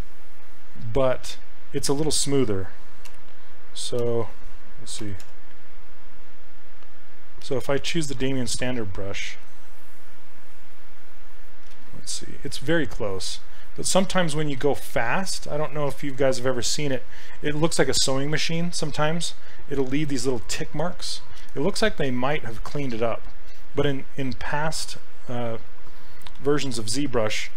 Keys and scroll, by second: 1.3 ctrl+z, 3.1-5.8 typing, 7.7 m, 11.8 ctrl+z, 12.5 s, 14.6 ctrl+z, 26.4 ctrl+z.